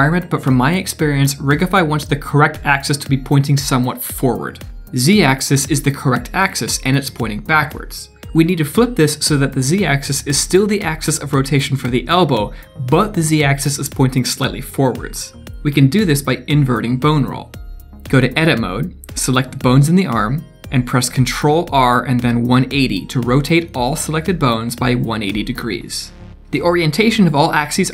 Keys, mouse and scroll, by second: 16.4 middle click, 18.8 ctrl+r, 25.4 click, 26.4 click.